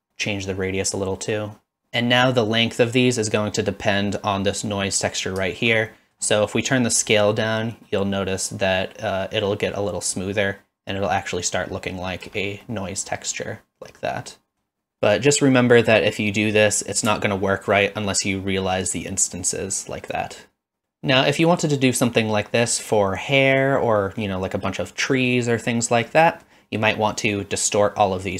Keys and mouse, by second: 0.3-1.8 shift+drag, 5.9 middle click, 7.1-12.3 shift+drag, 12.6-14.5 middle drag, 14.6 middle click, 17.8-18.9 alt+drag, 19.5 alt+click, 20.8-22.7 middle drag, 23.3-24.2 middle drag, 26.1 middle click.